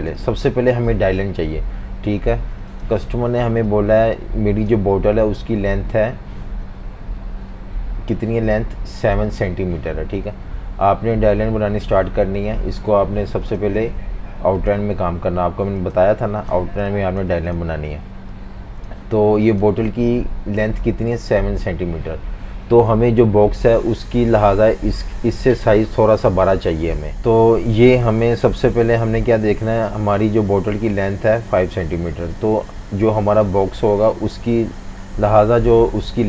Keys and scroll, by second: 0.1 space, 16.6 typing.